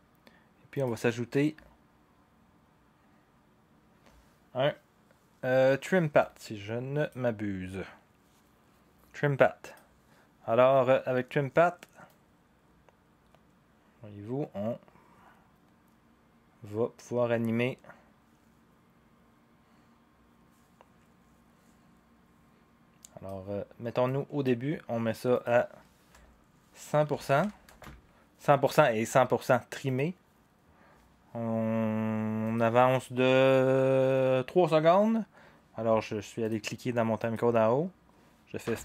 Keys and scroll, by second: 27.0-27.9 typing, 30.9 typing, 38.6-38.8 typing.